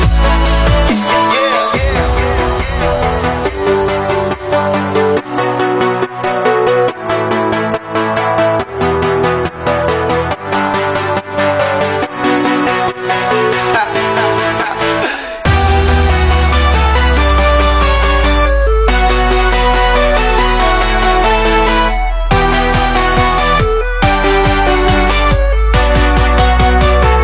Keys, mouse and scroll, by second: 1.2 scroll down 2, 1.4-2.5 middle drag, 2.5 click, 2.6-3.2 scroll down 1, 3.2-5.6 drag, 5.6 middle drag, 5.8 click, 6.1 middle click, 6.5 click, 6.7-8.9 middle drag, 8.9 shift+d, 11.7-12.8 middle drag, 12.8 p, 14.4-16.6 drag, 16.6 middle click, 17.3 click, 17.6-18.1 middle drag, 18.1 click, 18.3 middle click, 19.0 s, 21.0 s, 26.3-27.2 drag.